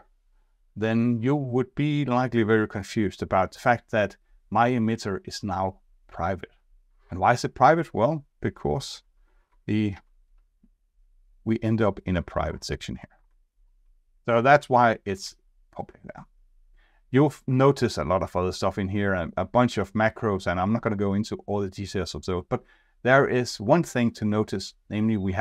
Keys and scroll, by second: 9.9 F2, 13.1 ctrl+Tab, 14.1 ctrl+shift+Up, 15.1 ctrl+Tab.